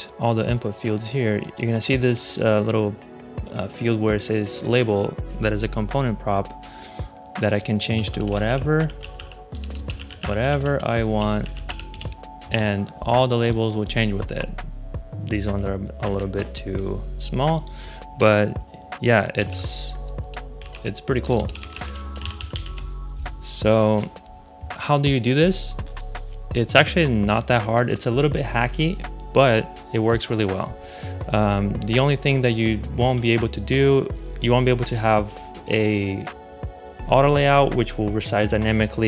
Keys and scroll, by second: 7.6-12.0 typing, 15.9 super+z, 19.3 shift+i, 20.3-22.9 typing.